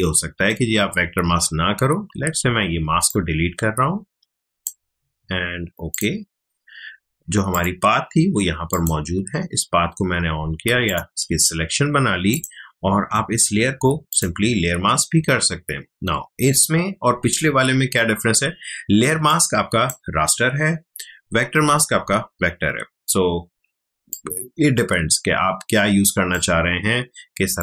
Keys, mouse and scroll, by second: 2.4 ctrl+alt+z, 3.1-5.9 drag, 10.8 ctrl+click, 19.1 space, 19.3 click, 19.5 space, 23.5 ctrl+space, 24.1 ctrl+click, 24.2 ctrl+space, 27.5 click.